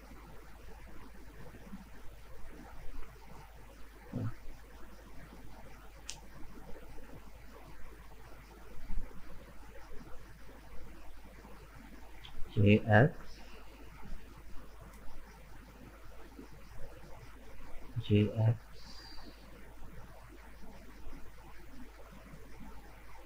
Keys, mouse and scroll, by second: 0.1-0.5 scroll up 2, 0.5 right click, 0.8-3.6 middle drag, 3.6 click, 4.1-6.1 middle drag, 6.1 right click, 6.6-9.6 middle drag, 10.0-12.2 middle drag, 12.2 g, 14.4-16.4 middle drag, 16.4 right click, 16.7-17.8 middle drag, 17.8 g, 21.4-23.2 middle drag.